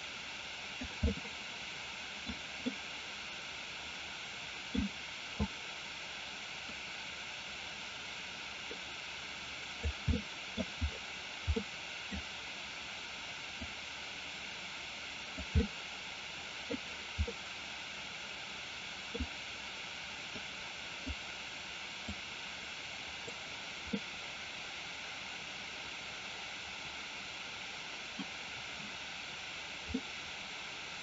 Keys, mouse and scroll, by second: 1.2-2.4 middle drag, 2.7-4.8 middle drag, 6.8-9.8 drag, 10.2 middle click, 11.7 click, 13.7-15.4 drag, 15.6-16.8 middle drag, 17.3-19.2 middle drag, 20.4 click, 22.3 click, 24.0-28.3 middle drag, 30.0-31.0 middle drag.